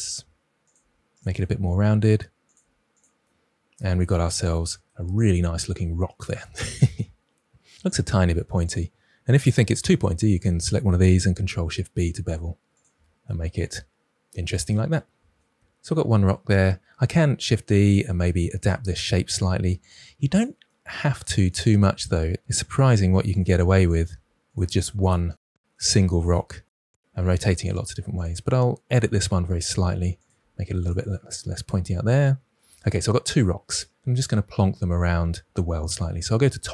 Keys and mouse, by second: 0.7 g, 2.5 g, 2.9 click, 3.7 Tab, 7.7 Tab, 7.8 click, 8.0 g, 8.6 click, 11.4 ctrl+b, 12.7 click, 12.9 Tab, 17.2 shift+d, 18.1 Tab, 18.8 g, 19.2 click, 19.8 g, 20.3 click, 21.6-25.8 typing, 22.8 click, 24.4 click, 26.0 drag, 26.9 g, 27.1 click, 27.2 g, 27.4 click, 28.9-29.3 drag, 29.2 g, 30.3 g, 32.5 Tab, 36.2 KP_7.